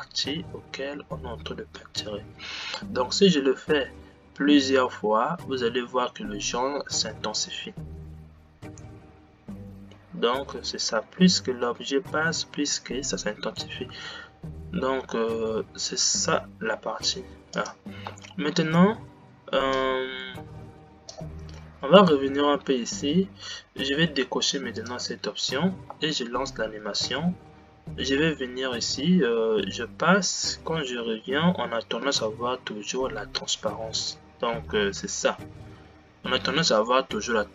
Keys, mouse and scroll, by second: 18.3 space, 20.1-26.0 drag, 26.0 space, 27.3 g.